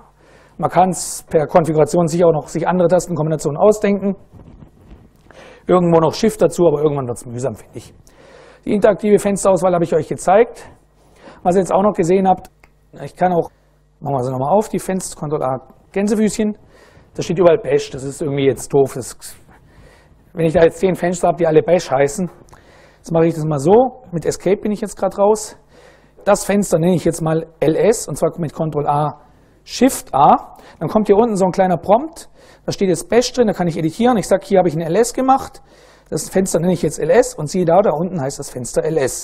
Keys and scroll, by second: 13.3 super+Right, 14.9 ctrl+a, 15.6 shift+', 16.9 Down, 17.2 Down, 22.7 Escape, 28.5 ctrl+a, 29.5 shift+a, 32.8-34.5 typing, 35.8 Return.